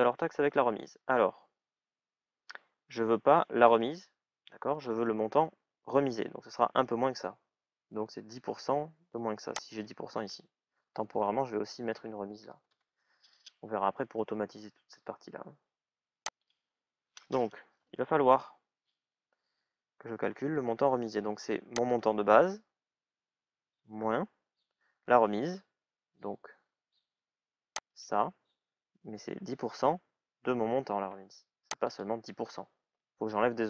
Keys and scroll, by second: 11.8 shift+à, 12.5 Return.